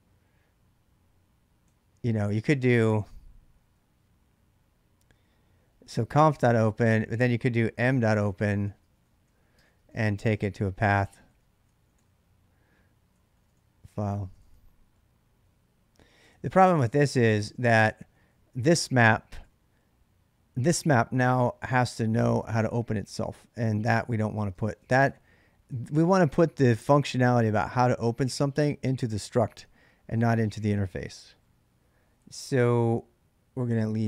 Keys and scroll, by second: 1.2-4.8 typing, 6.1-22.7 typing, 14.2 ctrl+[, 23.7-25.7 typing, 32.0 j, 32.3 j, 32.3 j.